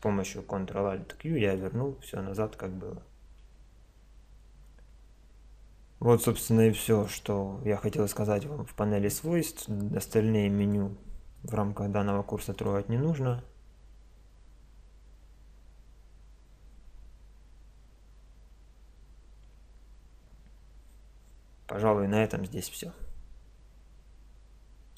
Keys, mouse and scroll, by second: 0.0 n, 0.0 t, 1.6-3.4 middle drag, 3.4 KP_5, 6.9 click, 8.5 middle click, 9.2-14.3 drag, 14.2-17.3 middle drag.